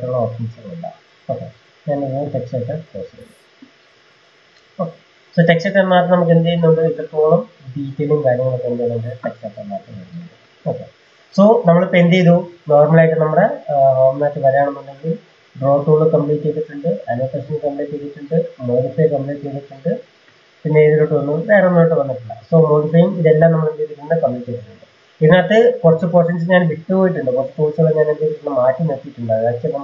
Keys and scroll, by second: 6.9 Delete.